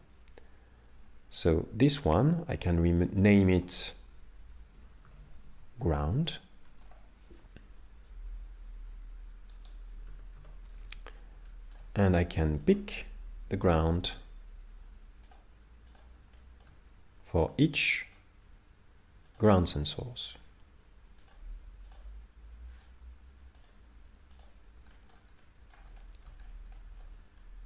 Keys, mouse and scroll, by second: 1.4 right click, 1.6 right click, 2.9 click, 3.2 click, 9.6 right click, 10.1 a, 10.3 a, 11.5 shift+middle click, 12.7 click, 15.3 click, 16.3 shift+middle click, 17.5 click, 19.3 click, 20.2-21.3 scroll down 7, 21.3 click, 22.7-23.4 scroll down 3, 23.6 click, 24.9 shift+middle click, 25.4 middle click, 26.0 shift+middle click, 26.4 scroll up 3, 26.7 middle click, 27.4 shift+middle click.